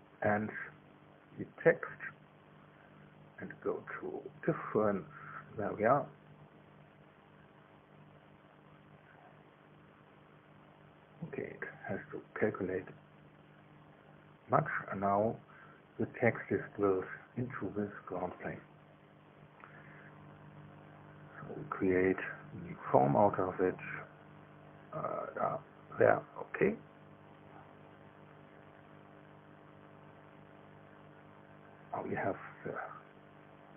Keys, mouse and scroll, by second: 2.3 ctrl+click, 6.3 click, 15.4 middle click, 16.2 shift+middle click, 16.8-20.0 shift+middle drag, 20.9 click, 22.1 click, 26.0 click, 29.6 middle click, 31.9 click.